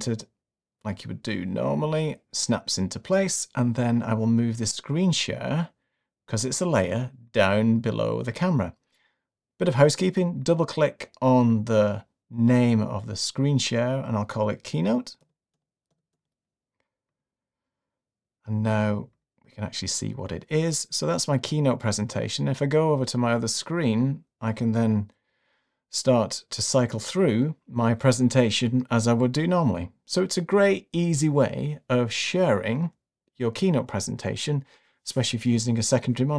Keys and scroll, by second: 25.3 Right, 27.1 Right, 28.9 Right, 30.6 Left.